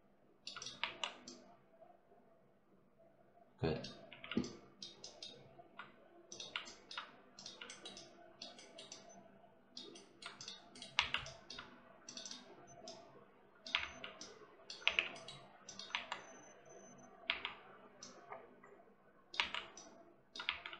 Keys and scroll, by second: 0.6 1, 3.9 3, 10.8 1, 13.6 3, 14.7 w, 15.8 1, 17.1 3, 19.2 1, 20.3 3.